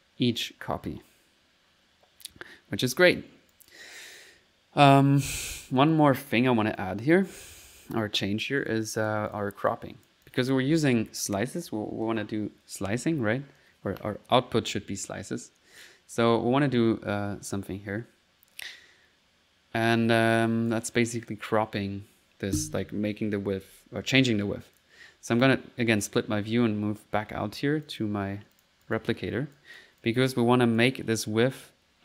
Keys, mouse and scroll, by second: 2.6 middle click, 2.6 typing, 3.0 click, 3.5 click, 6.8 click, 8.2 right click, 8.8 click, 9.3 click, 9.6 typing, 9.7 click, 10.9 click, 24.8 click, 26.3-27.9 middle drag, 27.9 click, 28.6 click, 28.9 click, 29.6 click, 30.0 click, 30.5 middle click, 30.5 click, 30.8 click.